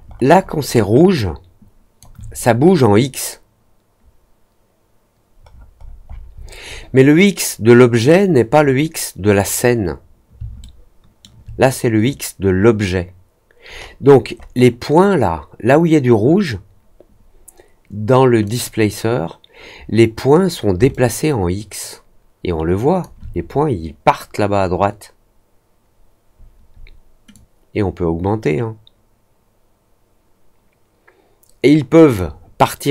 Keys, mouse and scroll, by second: 0.0 alt+scroll up 1, 0.3 alt+middle click, 0.6 alt+middle click, 1.1 alt+click, 5.4 middle click, 5.7 middle click, 6.0 middle click, 6.3 middle click, 6.6 middle click, 10.5 alt+middle click, 13.6-14.4 scroll up 3, 18.4 click, 20.8-22.9 alt+drag, 27.3-32.1 drag.